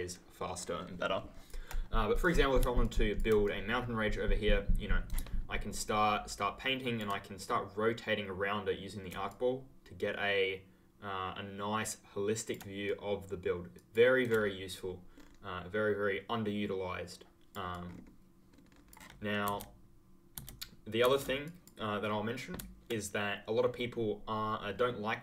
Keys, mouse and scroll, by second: 0.7-1.2 ctrl+scroll down 1, 2.8 ctrl+click, 2.9 ctrl+scroll down 1, 3.0 ctrl+scroll, 3.4 right click, 6.5-7.3 ctrl+scroll down 1, 7.3 right click, 9.2 ctrl+click, 12.8 right click, 13.7 click, 14.7 ctrl+click, 15.1-16.1 ctrl+scroll down 1, 17.8-18.4 ctrl+scroll up 1, 18.4-19.4 ctrl+scroll down 1, 19.4 ctrl+z, 21.4 click.